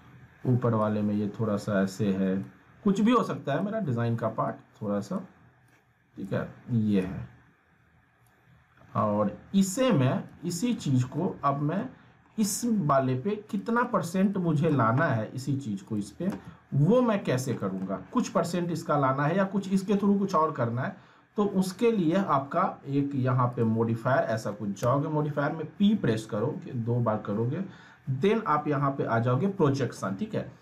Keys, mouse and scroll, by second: 3.7 w, 4.5-5.4 drag, 9.1 r, 9.7-10.3 click, 10.3 w, 10.9 alt+w, 11.8-12.4 middle click, 11.8 scroll down 1, 13.5 click, 16.3 z, 16.7 scroll down 1, 16.9-17.6 alt+middle click, 23.5 click, 24.8 p.